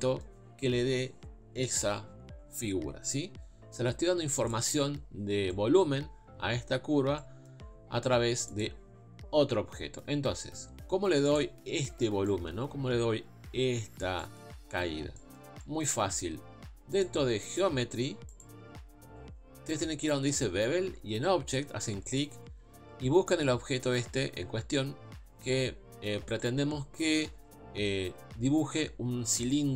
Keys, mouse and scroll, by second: 11.3 click, 22.1-23.7 drag.